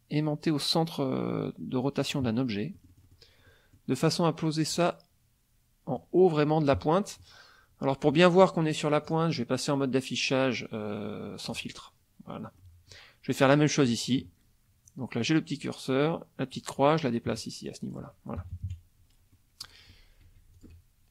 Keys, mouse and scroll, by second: 2.0 click, 2.7 middle click, 3.4 middle click, 4.7 click, 9.0 click, 11.5 click, 12.6 middle click, 13.4 click, 13.8 click, 16.5-18.1 drag, 18.4 KP_Subtract, 19.3 middle click, 20.5 shift+click.